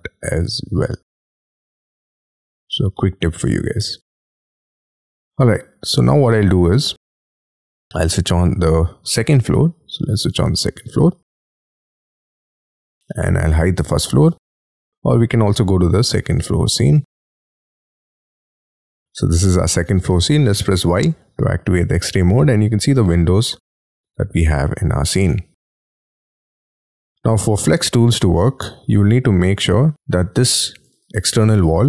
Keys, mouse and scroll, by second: 4.3 double click, 4.9 middle click, 5.1-5.8 scroll down 21, 6.7 middle click, 11.2 scroll up 6, 11.5 middle click, 20.6 y, 25.2 middle click, 26.6 y, 29.9 double click, 30.9 double click, 31.1 double click, 31.2 double click.